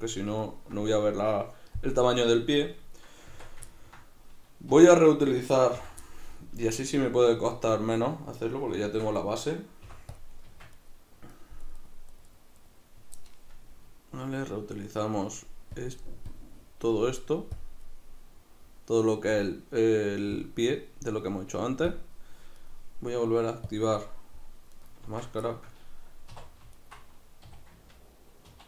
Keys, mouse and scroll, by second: 3.0 right click, 3.3 Tab, 3.7-5.0 ctrl+middle drag, 4.8 3, 5.0 right click, 5.8 l, 6.1-9.3 middle drag, 6.6 l, 8.9 shift+d, 9.3 right click, 9.8 p, 10.5 Tab, 10.8 right click, 11.6 right click, 11.8 right click, 12.2 right click, 12.3 right click, 12.6 right click, 15.8-22.6 drag, 22.6 right click, 23.7 click, 24.4 middle click, 24.8 right click, 25.1 Tab, 25.5-26.8 shift+middle drag, 26.3 2, 26.8 alt+right click, 27.5 a, 28.5 ctrl+e.